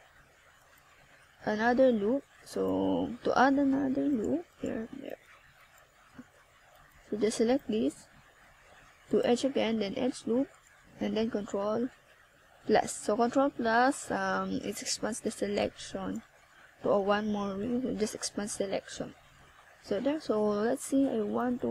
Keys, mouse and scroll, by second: 1.9 click, 3.3 o, 4.6 o, 6.7 scroll down 2, 7.9-8.4 scroll down 1, 9.2 click, 16.3 click, 19.5 click.